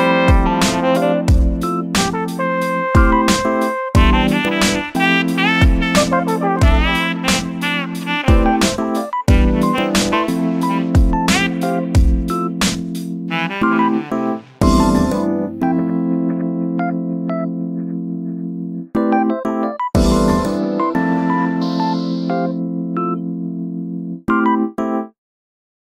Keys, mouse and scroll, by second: 0.8 shift+a, 1.4 KP_0, 2.0-2.8 scroll down 4, 8.5-9.1 scroll up 8, 9.1-26.0 shift+middle drag.